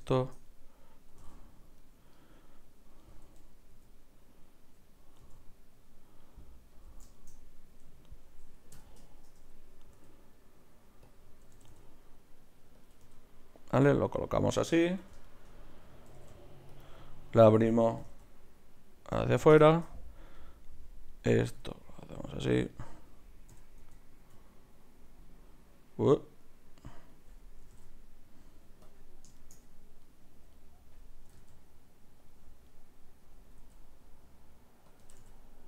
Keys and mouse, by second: 1.1 r, 2.2 click, 3.1 r, 8.7 KP_3, 10.0 r, 11.1-12.9 drag, 11.5 r, 13.1 r, 14.1 r, 14.6-17.3 drag, 14.9 KP_1, 15.2 right click, 16.1 r, 17.3-19.3 right drag, 18.0 g, 19.6 middle click, 20.4 right click, 21.5 g, 23.5 r, 27.7 r, 30.1-31.3 drag, 31.3-32.3 right drag, 31.3 g, 32.7-34.5 right drag, 33.7 r, 35.0 r.